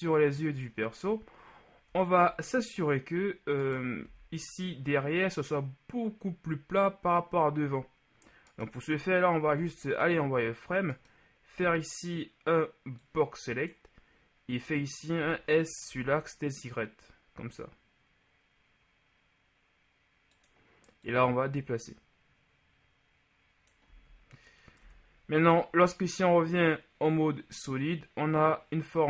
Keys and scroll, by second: 4.1 b, 9.6 z, 15.3 s, 24.0 z.